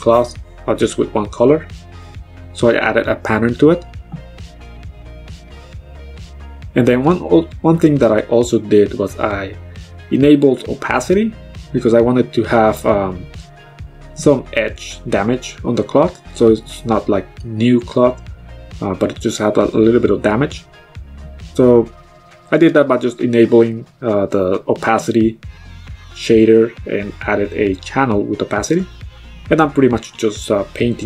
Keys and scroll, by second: 4.7 ctrl+z, 17.4 x, 18.9 ctrl+z, 28.2 x.